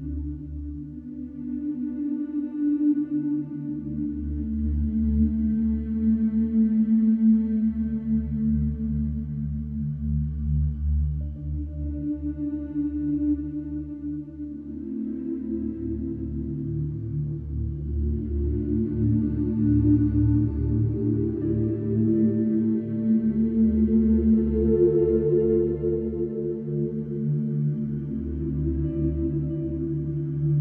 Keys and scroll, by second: 4.9 f, 10.9 f, 14.2 f, 25.3 4, 26.5 2.